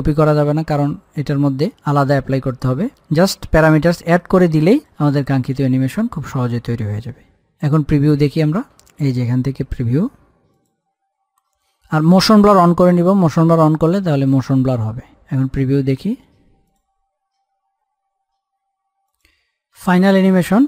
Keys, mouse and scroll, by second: 1.3 click, 2.8-5.6 drag, 5.6-5.9 scroll down 1, 7.7 scroll up 1, 9.9 click, 12.9 click, 16.7 click.